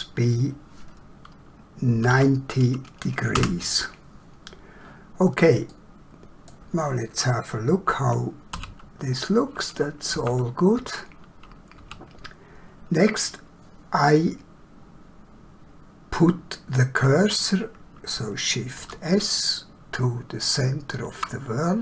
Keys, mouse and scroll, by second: 1.9 9, 2.1 0, 3.4 Return, 5.7 middle click, 18.8 shift+s, 20.4 shift+click.